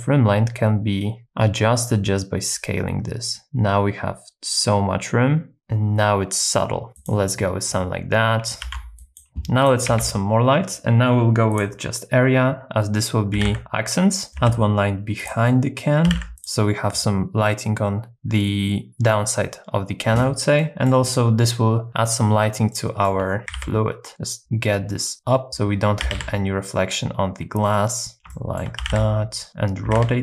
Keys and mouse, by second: 7.0 click, 8.6 ctrl+b, 9.9 shift+a, 13.4 r, 14.3 g, 14.3 x, 14.4 y, 15.2 click, 15.5 middle click, 16.1 g, 16.1 x, 16.4 click, 20.6 middle click, 22.7 shift+middle click, 23.5 g, 23.5 z, 26.0 s, 26.2 z, 28.3 shift+middle click, 28.8 g, 29.0 z, 30.0 r, 30.0 z.